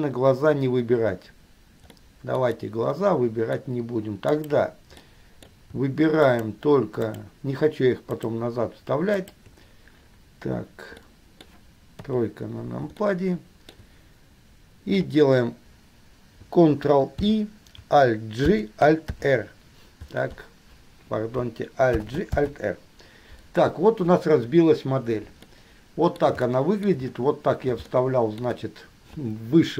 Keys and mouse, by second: 0.5-2.0 middle drag, 2.0-2.5 drag, 2.5 middle click, 2.8-3.8 drag, 3.8-4.5 middle drag, 4.5 click, 4.7 middle click, 5.2 click, 5.8 middle click, 6.4 shift+click, 7.2 shift+click, 8.3 shift+click, 9.3 shift+click, 11.2-12.2 drag, 12.2 KP_3, 13.2-13.9 shift+middle drag, 17.4 ctrl+i, 18.7 ctrl+g, 22.2 alt+g, 22.5 alt+r, 25.7-26.3 middle drag, 26.8-27.2 shift+middle drag, 28.3 shift+middle click.